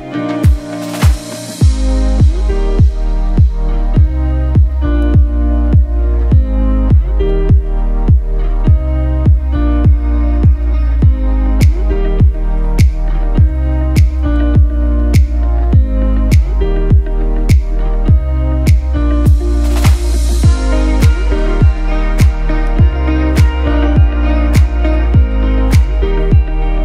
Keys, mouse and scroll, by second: 9.9-10.6 typing, 10.2 click, 11.0 ctrl+z, 11.7 right click, 12.2 click, 16.9 right click, 17.5 click, 18.6 scroll down 1, 20.6 ctrl+z, 22.4 click.